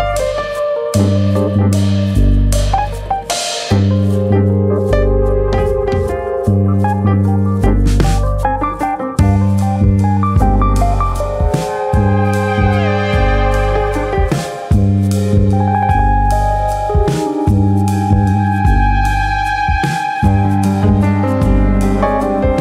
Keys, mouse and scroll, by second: 0.2 click, 0.2 middle click, 1.6 middle click, 2.1 ctrl+click, 2.7 ctrl+click, 3.3 KP_1, 4.3 click, 5.9 alt+click, 6.4 click, 8.1 click, 8.3 alt+click, 10.9 click, 11.9 click, 13.7 click, 15.4 click, 16.3 click, 17.5 click, 18.4 click, 20.4 click, 21.9 ctrl+KP_Add, 21.9 click.